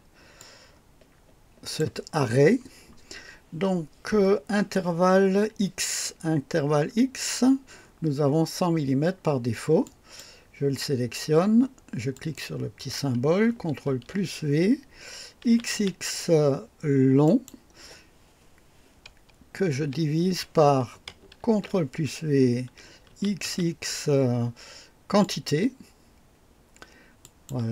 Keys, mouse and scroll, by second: 0.4-1.9 drag, 9.8 click, 12.1 click, 13.8 ctrl+v, 13.9 ctrl+v, 15.4 x, 15.5 x, 15.7 x, 17.2 click, 19.7-20.4 typing, 21.4 ctrl+v, 21.7 typing, 23.1 x, 23.1 x, 25.2 click, 27.2 click.